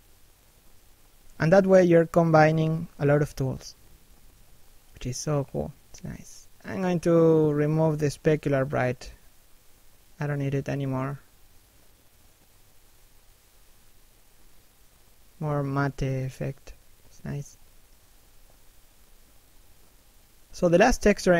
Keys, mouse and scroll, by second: 0.8 shift+middle click, 1.2-1.9 scroll up 1, 9.2 middle click, 11.0 middle click, 12.7 scroll up 1, 12.9 middle click.